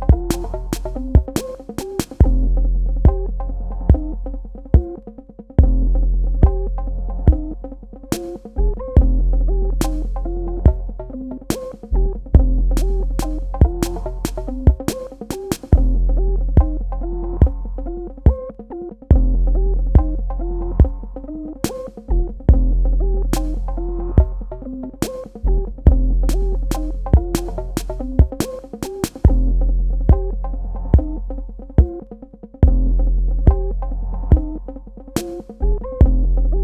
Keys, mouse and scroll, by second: 1.0 alt+click, 11.5 v, 11.8 click, 12.1 space, 12.3 ctrl+alt+click, 13.4 click, 15.5 alt+click, 17.8 space, 18.6 click, 18.7 space, 19.3 ctrl+click, 28.5 space, 28.7 click, 29.1 ctrl+alt+click, 29.9 alt+click, 33.6 alt+click, 34.2 click, 34.5 space, 34.5 click, 34.8 click, 36.1 space, 36.2 click, 36.4 click.